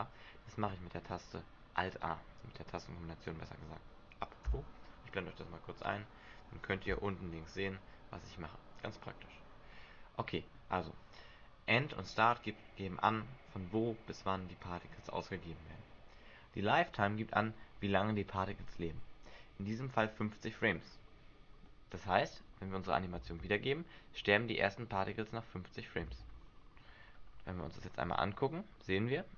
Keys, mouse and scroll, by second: 6.9 n, 20.5-21.6 scroll down 6, 21.6 middle click, 21.6-22.5 scroll down 1, 23.2 alt+a, 26.1 alt+a, 27.2-27.7 scroll down 3, 28.1 click.